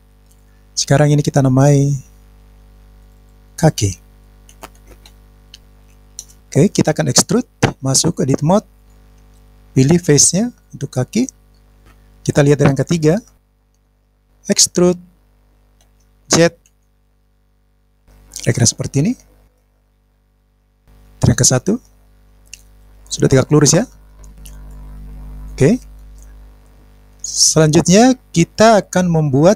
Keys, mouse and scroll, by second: 12.0 click, 13.1 KP_3, 15.8 e, 16.6 z, 17.9 click, 19.5-20.8 middle drag, 21.4 KP_1, 24.7-26.1 middle drag.